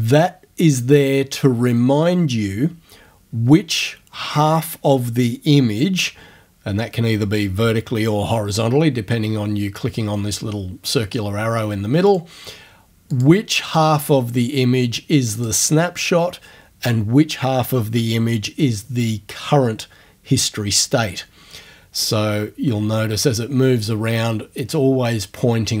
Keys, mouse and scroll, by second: 12.1 click, 13.1 click, 14.0 click, 15.4 click, 22.0 click.